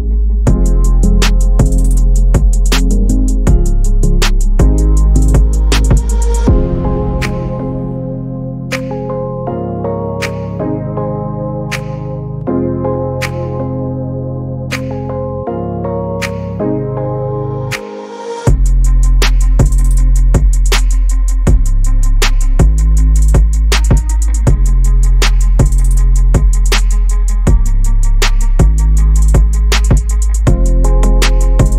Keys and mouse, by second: 0.0-0.9 typing, 0.1 ctrl+z, 1.3 Tab, 1.6 click, 2.1-2.6 drag, 2.6 shift+middle click, 3.0 shift+middle click, 3.5 Tab, 3.7 ctrl+r, 3.9 s, 4.2 Tab, 4.4 shift+drag, 5.0 middle click, 5.3 shift+middle click, 5.6 shift+middle click, 6.7-10.2 drag, 10.2 Tab, 10.4 Tab, 10.6 click, 10.6 middle click, 10.9 middle click, 11.4 click, 11.7 shift+click, 11.9 Tab, 12.1 z, 12.2 click, 12.5 Tab, 12.7 click, 13.3 click, 13.4 Tab, 13.5 click, 13.6 Tab, 14.0 alt+s, 14.4 KP_3, 14.6 KP_1, 14.7 z, 15.0 alt+s, 15.7 click, 15.8 alt+s, 16.3 click, 17.4 shift+middle click, 17.5 Tab, 18.0 shift+middle click, 18.3 shift+middle click, 19.3 middle drag, 19.9 KP_7, 20.1 z, 20.7 shift+click, 21.1 shift+right click, 22.0 shift+a, 22.0 s, 22.6 s, 22.9 Tab, 23.4 r, 25.4 Tab, 25.6 Tab, 26.1 Tab, 26.2 shift+a, 27.1 s, 28.4 click, 29.0 middle click, 29.2-31.4 typing, 29.6 shift+middle click, 30.3 Tab, 30.4 Tab.